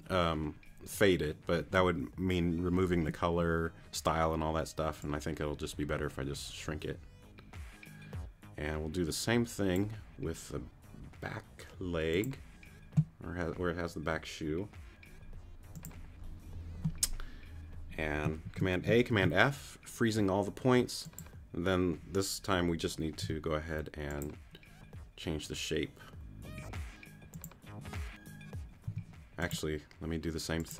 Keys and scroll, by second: 18.4 super+a, 19.1 super+f, 23.2 t, 28.9 t, 29.5 shift+t.